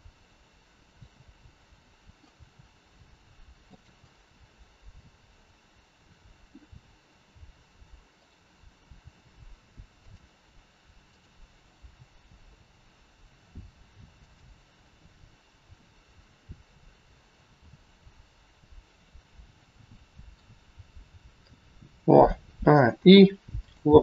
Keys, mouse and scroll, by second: 0.8 click, 1.6 middle click, 2.2 g, 4.1 middle click, 5.3-7.0 scroll down 1, 8.1 click, 9.0 g, 11.1 click, 11.7 g, 18.8 scroll down 1, 19.6 middle click, 19.6 scroll down 2, 22.2 a, 22.8 i.